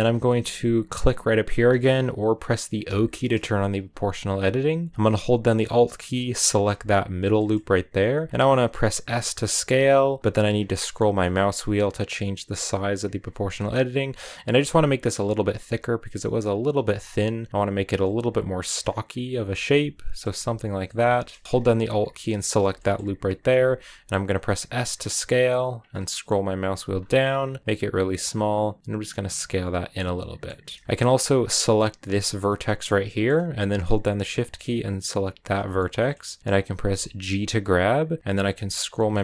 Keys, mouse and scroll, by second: 2.6 o, 6.3 alt+right click, 7.0 scroll down 1, 7.3 middle click, 8.0 s, 19.2 middle click, 19.2-19.6 scroll down 5, 19.6 middle click, 20.2 s, 20.7 middle click, 21.4-22.3 scroll up 5, 22.3 alt+right click, 22.6 middle click, 22.7 scroll up 3, 23.3 s, 29.8-32.0 middle drag, 32.0 right click, 32.2-35.2 middle drag, 35.2 shift+right click, 35.4 scroll down 2, 35.6-36.7 middle drag, 36.7 g.